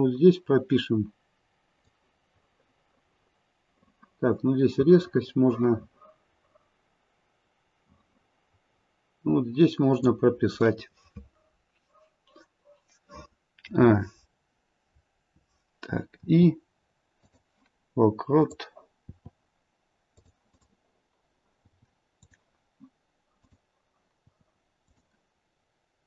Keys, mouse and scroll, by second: 1.8 click, 13.6 a, 16.1 i, 18.4 click, 19.0 i, 20.5 click, 21.6 i, 23.4 click, 24.2 i.